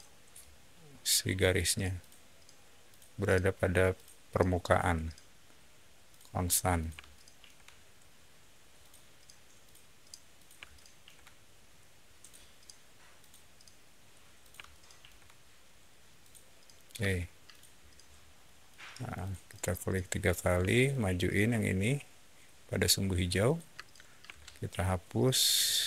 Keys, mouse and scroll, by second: 0.2 alt+middle click, 1.2 alt+click, 1.9 alt+click, 2.8 alt+click, 3.8 alt+click, 4.6 alt+click, 6.0 alt+click, 6.6 alt+click, 7.0 shift+middle click, 8.7 shift+click, 9.5 shift+click, 10.2 shift+click, 10.6 shift+middle click, 12.1 shift+click, 13.0 shift+click, 14.3 shift+click, 14.6 shift+middle click, 16.1 shift+click, 16.9 space, 17.4 click, 17.7-18.1 scroll down 2, 18.3 middle click, 18.6 scroll up 1, 18.9 click, 19.1 click, 19.4 click, 20.5 m, 20.8 click, 23.3 click, 23.7 space, 24.2 e, 24.7 click.